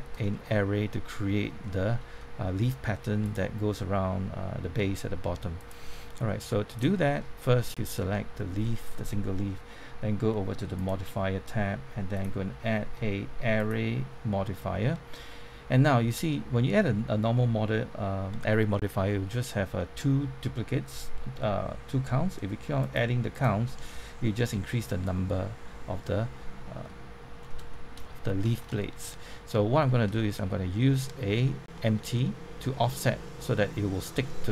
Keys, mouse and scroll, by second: 0.3 shift+middle click, 1.6 shift+middle click, 2.1 scroll down 1, 3.2 click, 6.0 scroll up 1, 6.7 click, 7.1 shift+middle click, 8.0 shift+middle click, 10.7 click, 14.7 scroll down 1, 15.1 shift+middle click, 15.8 middle click, 16.2 shift+middle click, 22.7 click, 23.8-26.8 scroll down 1, 26.8-27.3 scroll up 1, 27.3 scroll down 1, 27.7 shift+middle click, 28.5-29.7 shift+scroll up 1, 29.7-30.0 scroll up 1, 30.1 shift+middle click, 32.2 shift+middle click, 32.7 scroll down 1.